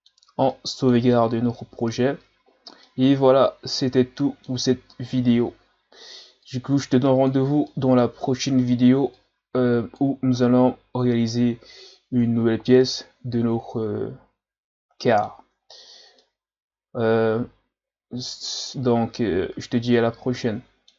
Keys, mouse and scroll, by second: 0.5-1.7 middle drag, 1.7 ctrl+s, 2.5-2.8 scroll down 2, 2.8-4.9 middle drag, 4.9-5.9 scroll down 2, 5.9-6.5 scroll down 1, 6.5-7.7 drag, 7.7-9.2 middle drag, 9.2-10.4 drag, 10.4-15.7 middle drag, 15.7-16.2 scroll up 2, 16.2-19.2 middle drag.